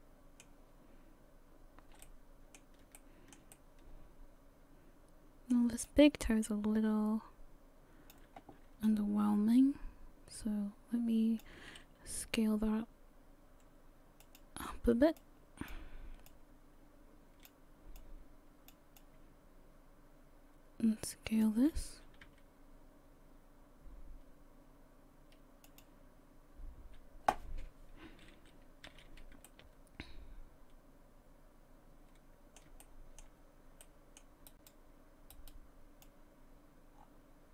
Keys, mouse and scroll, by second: 2.0 middle click, 3.0 shift+middle click, 3.0 shift+middle click, 3.5 middle click, 5.9 click, 8.9 shift+click, 12.2 s, 15.2 click, 16.3 click, 18.0 click, 19.0 click, 22.3 s, 28.9 a, 29.1 a, 29.5 middle click, 32.8 shift+middle click, 33.8 middle click, 34.5 right click, 35.3 right click, 36.0 click.